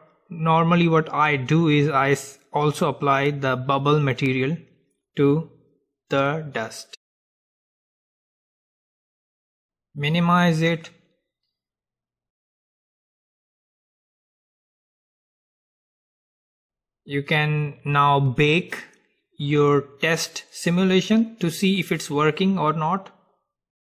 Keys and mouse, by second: 10.5-12.5 drag, 12.5-23.9 middle drag.